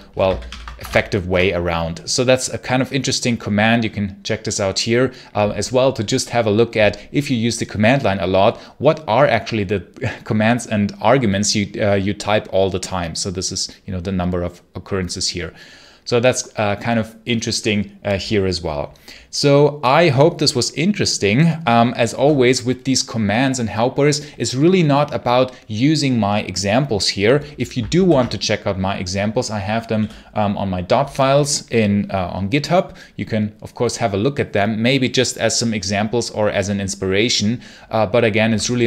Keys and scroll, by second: 0.1 ctrl+c, 0.3 ctrl+l, 0.6 Escape, 0.7 k, 1.2 Return.